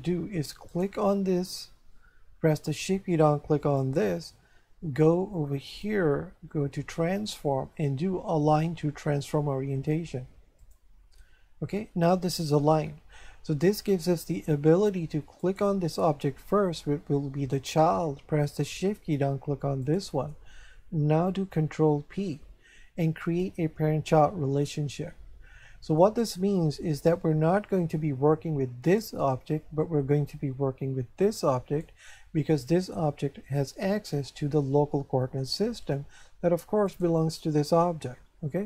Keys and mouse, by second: 0.7 right click, 3.8 shift+right click, 5.7 click, 10.6 click, 15.4 right click, 19.8 shift+right click, 21.8 ctrl+p, 23.2 click, 24.9 shift+middle click, 28.8 right click, 31.2 right click, 36.9 right click.